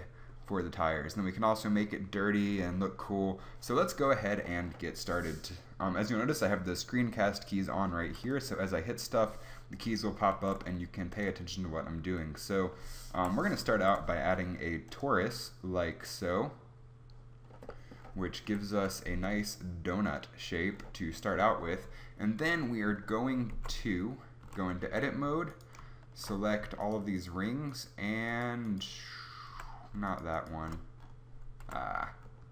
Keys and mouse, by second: 8.0 Delete, 8.6 Delete, 10.4 shift+a, 13.1 Delete, 13.7 shift+a, 17.4-18.4 middle drag, 18.4 KP_7, 18.8 KP_5, 24.0 Tab, 24.5 a, 24.9 z, 31.7 a.